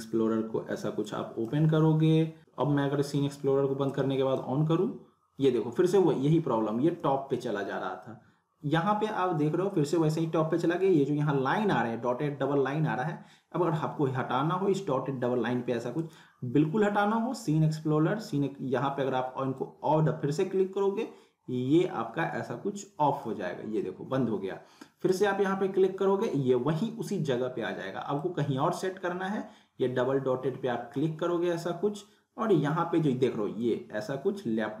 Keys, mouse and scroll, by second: 16.0 right click, 19.6-23.3 drag, 28.2-31.0 drag, 33.6-34.8 click.